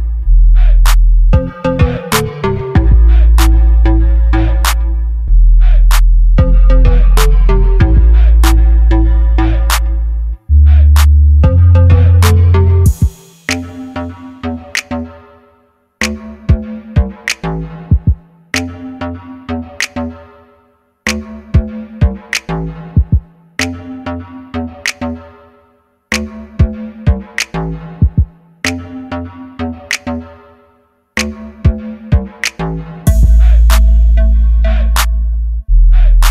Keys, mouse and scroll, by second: 1.2-2.8 middle drag, 3.2 KP_3, 4.3-5.6 drag, 6.1 click, 10.2 middle click, 11.1-12.1 middle drag, 12.4 KP_0, 14.0-15.4 drag, 17.2 click, 18.0-19.4 drag, 23.6-24.8 drag, 24.8 middle click, 25.6-28.6 middle drag, 29.3 click, 30.1 click, 30.7 middle click, 31.3-32.8 middle drag, 34.7 middle click, 35.4 middle click, 35.5 click, 35.5 middle click.